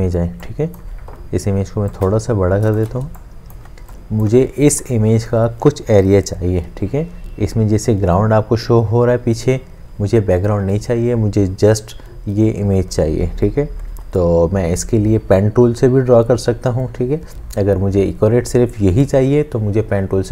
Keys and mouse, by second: 2.1 alt+click, 3.0 space, 3.5 click.